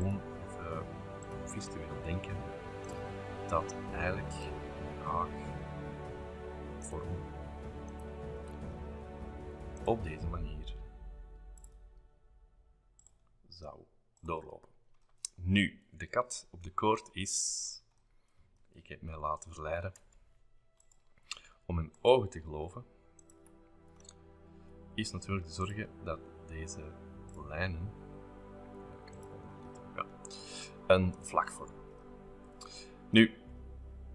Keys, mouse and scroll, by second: 0.0 click, 1.2 click, 2.9 click, 3.4 shift+middle click, 3.5-4.2 scroll up 3, 4.3 shift+click, 5.0 click, 6.8 click, 7.9 click, 8.6 shift+middle click, 8.7-9.1 scroll up 2, 9.8 click, 11.5 click, 12.4-13.8 drag, 14.1 click, 15.0-17.1 scroll up 5, 16.2 shift+middle click, 16.5 shift+middle click, 16.8 Escape, 17.6 middle click, 18.1 scroll down 1, 18.3-19.0 scroll up 1, 19.0 shift+middle click, 19.6 scroll down 1, 19.8 middle click, 20.0 scroll up 1, 20.0 space, 20.2 middle click, 20.8 click, 21.2 Delete, 23.4 click, 24.6 l, 25.6 click, 27.3 click, 29.1 click, 29.7 middle click, 30.7-31.0 scroll up 2, 31.0 shift+middle click, 32.1 middle click, 33.2 shift+middle click.